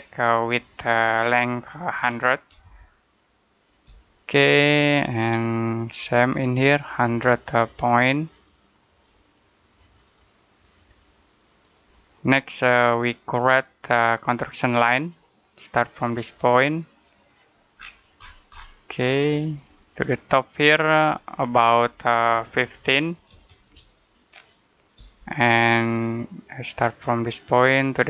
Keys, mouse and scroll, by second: 1.8-2.5 typing, 3.7 Return, 4.8 click, 14.9 click, 17.6-18.0 scroll down 1, 18.0-19.4 scroll up 1, 19.4 click, 22.7 typing, 24.8 Return, 27.2 click.